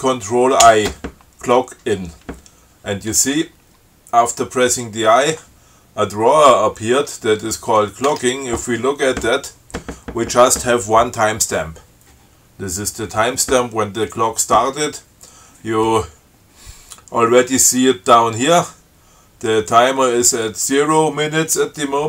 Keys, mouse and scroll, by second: 0.9 ctrl+i, 7.7 click, 8.3 Tab.